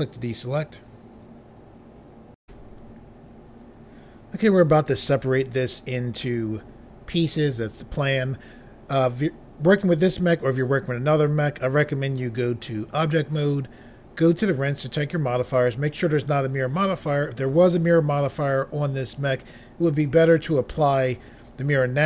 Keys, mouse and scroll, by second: 2.4 Pause, 12.0 click, 12.8 click, 14.9 click.